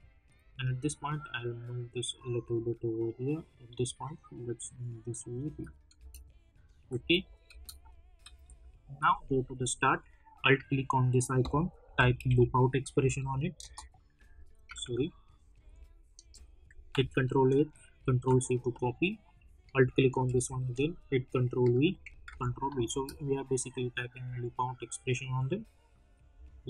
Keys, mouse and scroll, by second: 5.4 space, 6.6 click, 6.9 space, 8.2 -, 8.4 -, 9.0 click, 11.6-13.5 typing, 13.0 Down, 13.7 Return, 15.5 o, 16.2 Return, 16.8 ctrl+a, 18.1 ctrl+c, 20.6 ctrl+v, 20.9 click, 22.2 ctrl+v, 22.6 click, 22.8 space, 26.3 space.